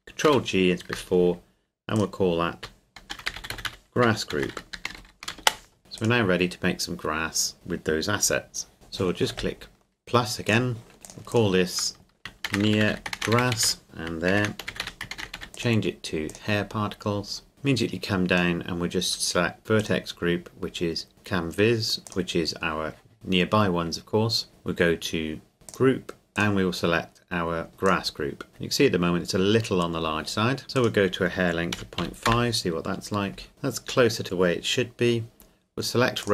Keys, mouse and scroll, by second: 0.3 ctrl+g, 1.9 click, 3.0-5.8 typing, 5.4 Return, 6.0 right click, 10.5 click, 12.4-15.1 typing, 13.8 click, 15.5 click, 22.1 click, 25.7 click, 27.9 click, 28.5-29.3 scroll down 1, 30.7 click, 31.7 KP_Decimal, 32.0 KP_5, 32.3 KP_Enter, 33.5 scroll up 1, 36.2 click.